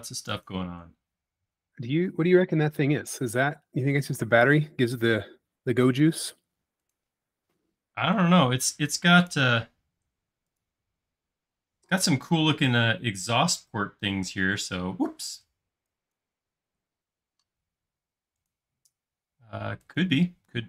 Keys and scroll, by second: 11.6 space, 15.3 e, 16.9-17.6 typing.